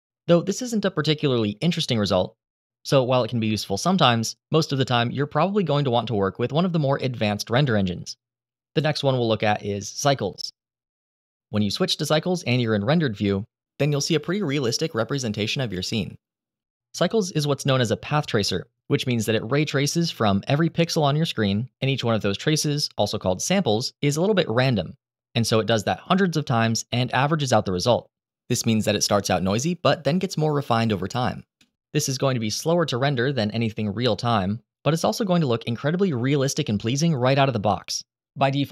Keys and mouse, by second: 9.2-10.6 drag, 13.9-14.5 middle drag, 15.5-15.9 middle drag, 28.8-29.5 middle drag, 30.6-31.1 middle drag.